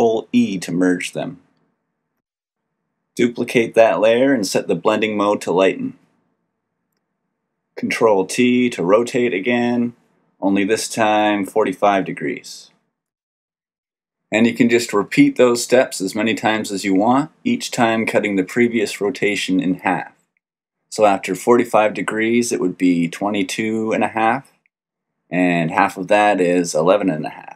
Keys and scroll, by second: 3.4 ctrl+j, 7.7 ctrl+t.